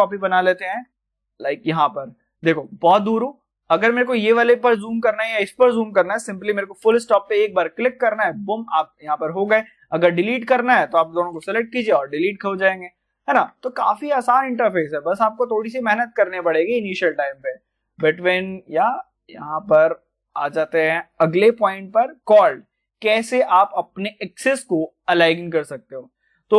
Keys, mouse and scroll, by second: 0.5 shift+d, 1.5 click, 2.0 scroll down 1, 2.6 middle click, 3.2 click, 7.9 click, 8.0 middle click, 8.4 scroll down 1, 9.4-9.7 scroll down 1, 10.0 shift+click, 12.3 scroll up 1, 13.1 shift+middle click, 13.8 scroll up 1, 14.3 middle click, 15.3 scroll up 1, 15.8-17.3 middle drag, 17.3-19.7 shift+middle drag, 19.7 scroll up 1, 21.0 click.